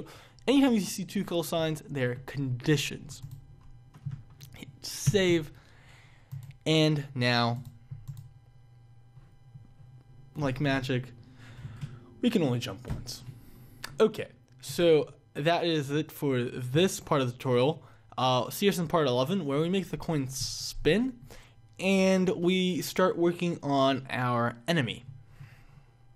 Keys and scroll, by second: 5.3 ctrl+s.